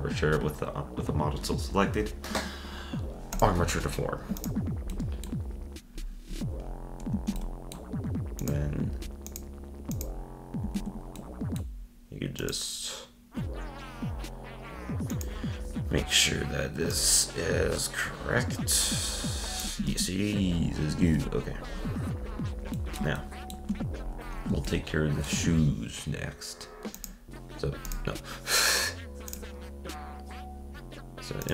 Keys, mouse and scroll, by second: 4.4 click, 4.9-6.0 middle drag, 6.0-6.6 scroll down 4, 6.6 scroll up 1, 7.4-8.4 middle drag, 8.4 click, 9.3 click, 10.0 click, 10.8 ctrl+Tab, 11.2-12.4 middle drag, 12.4 click, 15.1-16.6 drag, 16.9-19.0 drag, 19.8 z, 21.0 ctrl+Tab, 21.4-22.2 scroll down 5, 22.2 scroll up 2, 22.7-24.0 middle drag, 24.0-24.6 scroll up 1, 24.6-28.1 shift+middle drag, 29.3-31.5 drag.